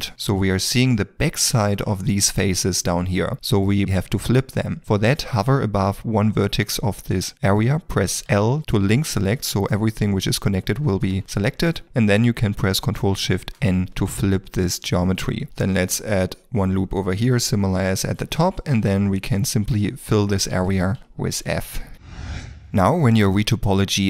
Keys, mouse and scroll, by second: 8.4 l, 8.6 middle click, 9.5 ctrl+middle click, 10.1 g, 11.1 Escape, 11.5 middle click, 14.1 ctrl+shift+n, 14.2 middle click, 15.5 ctrl+middle click, 15.6 ctrl+r, 16.6 middle click, 18.1 shift+click, 18.5 f, 19.1 f, 21.3 shift+middle click, 21.4 f, 22.1 middle click.